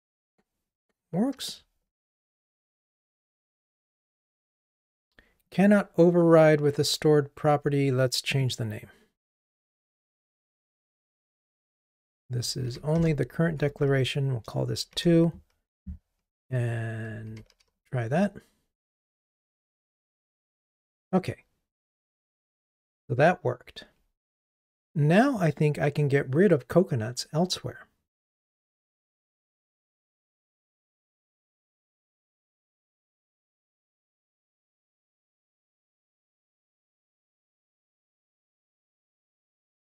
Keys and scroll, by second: 10.3 shift+F6, 17.5 ctrl+r.